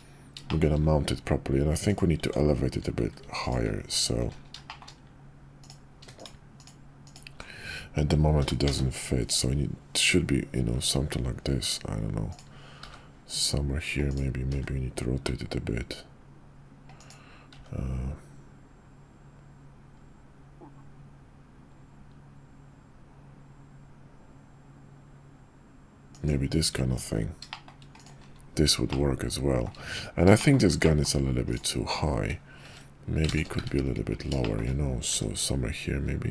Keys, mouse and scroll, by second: 0.5 shift+drag, 1.9 click, 2.2 Tab, 4.6 shift+click, 8.4 g, 12.8 g, 14.5 r, 17.5 g, 26.9 Tab, 27.5 shift+drag, 28.9-29.7 shift+drag, 30.4 shift+click, 30.8 middle click, 34.4 shift+click, 35.1 g.